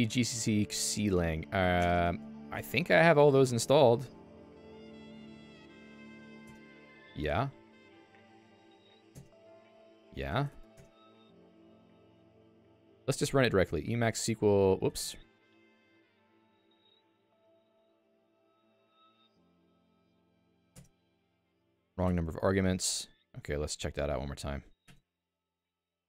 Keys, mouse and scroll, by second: 3.4 click, 4.8 super+Return, 5.4 g, 5.8 c, 6.4 Return, 7.7-8.9 typing, 9.1 Return, 10.5 i, 10.7 Return, 12.9 ctrl+g, 14.9 Escape, 15.1 Escape, 15.8 click, 17.1 Return.